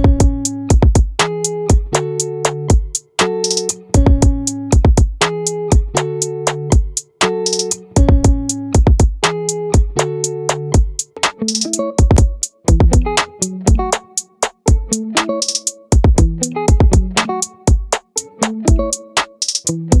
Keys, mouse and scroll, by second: 7.4-8.6 middle drag, 8.6 right click, 9.6 middle click, 12.0-13.8 middle drag.